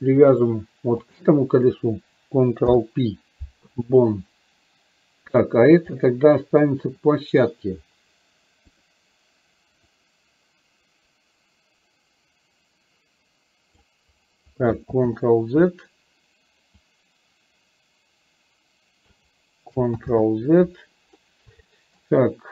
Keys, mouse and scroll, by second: 1.1 shift+click, 5.4 click, 6.1-6.8 middle drag, 8.8 click, 10.1-13.8 drag, 17.0-19.3 drag, 21.8 shift+middle drag.